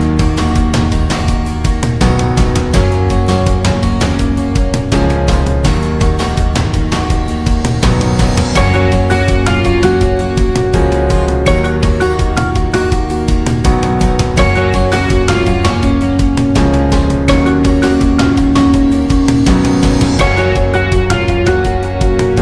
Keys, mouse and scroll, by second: 6.5-17.6 drag.